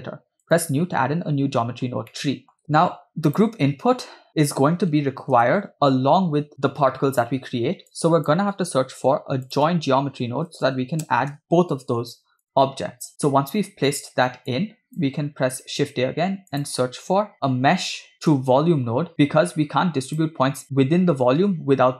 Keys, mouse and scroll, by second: 0.4-1.3 drag, 2.1-2.5 middle drag, 2.5-2.9 scroll up 5, 3.3 click, 5.5 KP_0, 7.9 click, 8.9 shift+a, 14.5 click, 15.7 shift+a.